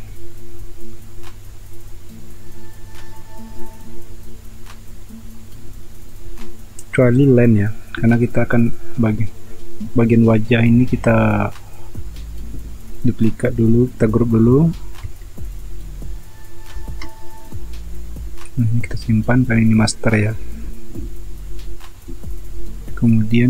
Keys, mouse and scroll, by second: 16.7 ctrl+j.